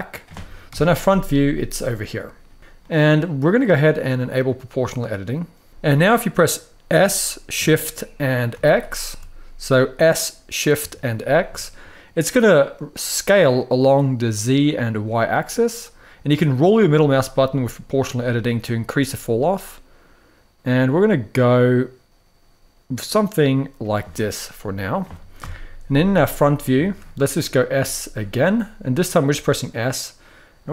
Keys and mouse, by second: 0.4 KP_1, 2.5 shift+middle click, 4.3 click, 5.7 shift+y, 6.6 s, 7.1 s, 7.2 s, 8.2 shift+x, 23.5 click, 24.0 middle click, 25.1 KP_1, 25.9 shift+middle click, 26.5 shift+middle click, 27.5 s.